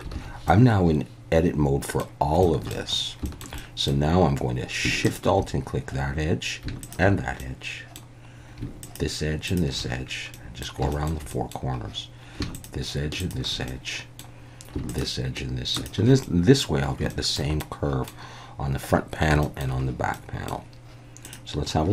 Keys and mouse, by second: 0.1 alt+a, 0.5-2.0 middle drag, 2.4 shift+middle click, 3.3 shift+middle click, 3.6 middle click, 6.8 alt+shift+click, 7.4 middle click, 8.9 alt+shift+click, 10.3 middle click, 10.9 shift+middle click, 11.3 middle click, 13.2 alt+shift+click, 13.7 middle click, 14.9 alt+shift+click, 15.8 alt+shift+click, 16.2 middle click, 17.1 shift+middle click, 17.6 middle click, 19.4 shift+middle click, 20.1 middle click.